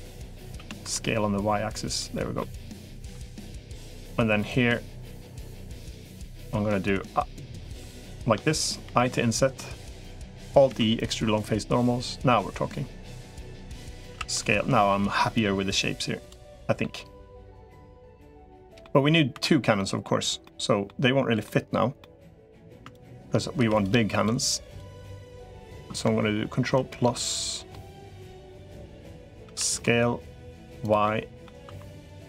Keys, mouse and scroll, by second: 0.3 s, 1.9 middle click, 2.5 click, 3.7 shift+click, 5.3 shift+click, 5.7 shift+click, 6.2 middle click, 7.9 shift+click, 8.7 i, 10.1 middle click, 10.5 alt+e, 13.5 middle click, 13.9 s, 16.2 middle click, 17.5 middle click, 18.4 middle click, 19.3 2, 19.6 middle click, 20.2 middle click, 21.3 middle click, 21.8 middle click, 22.7 shift+click, 23.5 click, 23.5 3, 23.9 shift+click, 24.5 shift+click, 24.9 middle click, 26.7 ctrl+KP_Add, 27.5 middle click, 28.5 middle click, 29.3 s, 30.8 middle click, 31.5-32.2 typing, 31.7 click, 32.0 middle click.